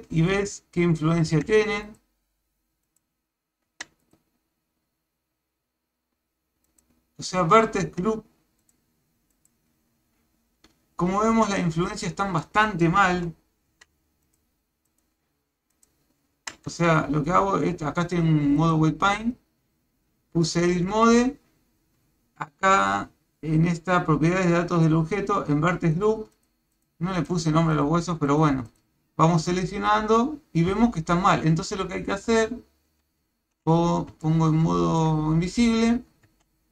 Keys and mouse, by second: 1.3 a, 1.8 click, 2.8 click, 3.7 a, 4.0 click, 6.7 click, 7.8 a, 8.6 click, 9.3 click, 11.4-12.6 middle drag, 13.1 KP_1, 13.7 a, 14.2 click, 14.9 click, 15.8 click, 16.3 a, 16.7 Tab, 18.6-20.6 drag, 20.9 Tab, 25.9 click, 26.3 click, 26.7 click, 27.2 click, 27.7 click, 28.3 click, 28.7 click, 29.5 click, 30.7 a, 32.5 shift+z, 33.0 shift+z, 34.2 shift+middle click, 36.3 Tab.